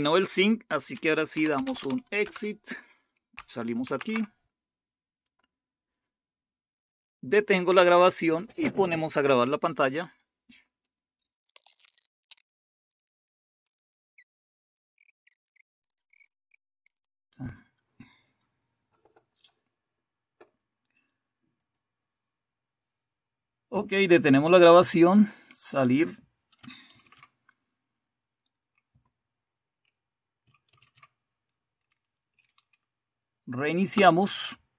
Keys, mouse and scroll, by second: 1.0-2.2 typing, 3.8 shift+super+q, 12.2 right click, 17.0-19.6 right drag, 21.5 click, 24.7 click, 26.9 shift+super+q, 30.6 shift+super+x, 32.2 Down, 33.9 Return.